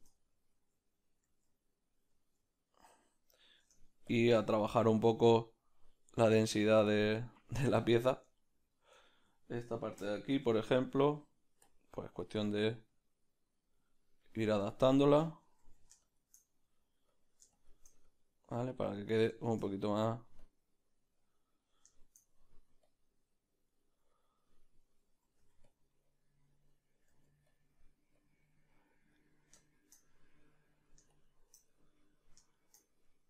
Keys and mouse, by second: 0.7 z, 4.2 Tab, 4.2 b, 7.3 middle click, 7.8 shift+middle click, 8.3 ctrl+middle click, 9.0-14.6 ctrl+middle drag, 12.3 f, 12.9 click, 13.6-14.6 drag, 15.6 ctrl+z, 16.0 shift+click, 16.4 middle click, 17.6-21.6 shift+drag, 19.4 shift+middle click, 19.9 middle click, 21.6-22.8 middle drag, 22.8 click, 23.6 middle click, 24.1-25.7 drag, 25.7 middle click, 25.7 f, 26.5 click, 27.5-28.5 middle drag, 27.5 f, 28.5-33.2 drag, 30.0 middle click, 31.6 middle click, 32.5 shift+middle click, 32.8 middle click.